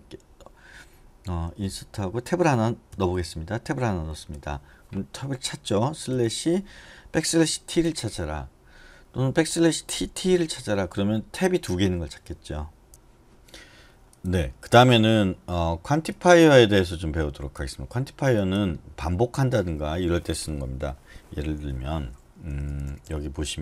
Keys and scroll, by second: 3.1 Tab, 4.3 Escape, 6.3 /, 7.5 \, 7.9 t, 10.3-11.0 typing, 22.5-23.6 typing.